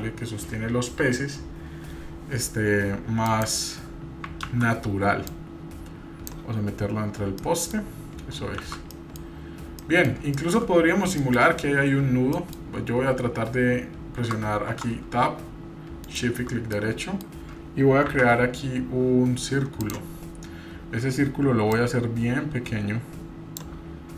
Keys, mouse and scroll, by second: 3.3 click, 4.5 ctrl+z, 5.3-6.3 drag, 7.1 scroll down 1, 7.4-7.7 middle drag, 7.7-8.6 scroll down 3, 8.6 shift+z, 8.9 middle drag, 9.3-9.8 scroll up 2, 9.8 middle drag, 10.3 shift+middle drag, 10.7-11.1 scroll up 2, 11.2 shift+middle click, 11.5 scroll up 1, 11.9 scroll down 1, 12.3 middle click, 12.7 scroll up 2, 14.6 Tab, 16.1-16.4 shift+right drag, 16.7 middle click, 18.1 shift+a, 21.7-23.6 drag.